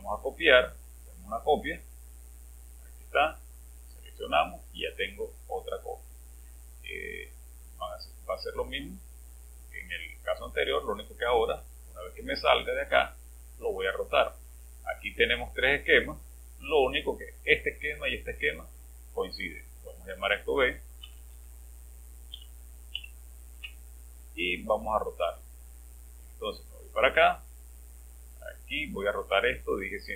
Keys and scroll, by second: 21.1 BackSpace, 21.1 BackSpace, 21.3 BackSpace, 22.3 Home.